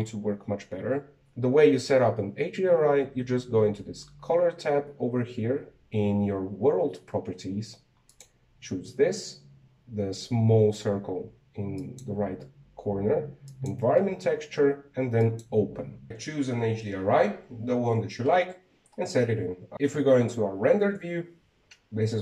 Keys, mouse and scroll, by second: 9.2-12.2 drag, 12.9-15.9 drag, 19.7 shift+z.